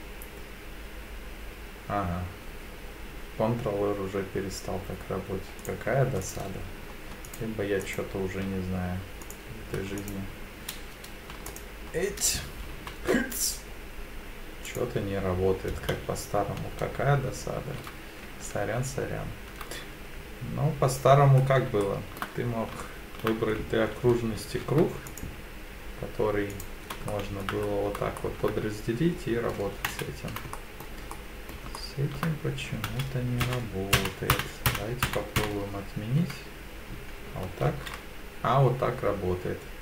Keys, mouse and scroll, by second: 6.2 click, 7.3 alt+click, 7.8 alt+click, 9.2 click, 10.0 alt+click, 11.5 alt+click, 12.8 ctrl+r, 16.0 ctrl+z, 21.5 scroll down 2, 21.8 shift+middle click, 22.5 scroll up 1, 22.8 shift+middle click, 24.4 ctrl+r, 26.5 click, 27.1 shift+middle click, 27.6-28.0 scroll up 2, 28.2 shift+middle click, 29.9 ctrl+z, 30.5 middle click, 31.1 middle click, 31.8 shift+middle click, 32.9 ctrl+z, 33.4 ctrl+z, 34.3 ctrl+z, 34.7 ctrl+z, 35.4 ctrl+z, 37.6 ctrl+r.